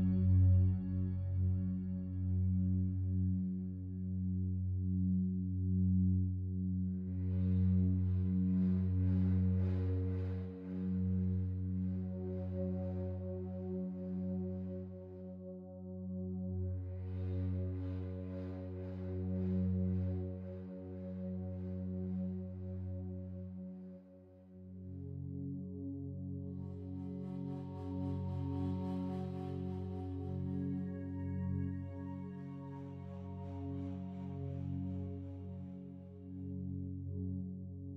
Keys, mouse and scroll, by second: 0.0 s, 0.8-1.8 alt+shift+drag, 1.9 click, 2.9-3.3 typing, 4.4 click, 5.5 typing, 6.4 click, 7.6-8.5 drag, 8.6-12.1 ctrl+alt+drag, 14.5-17.4 ctrl+alt+drag, 18.3 1, 19.1-21.4 ctrl+alt+drag, 22.7-23.8 ctrl+alt+drag, 24.5 alt+click, 25.0 alt+click, 26.4-27.7 alt+drag, 28.1-31.4 drag, 32.4-37.9 drag.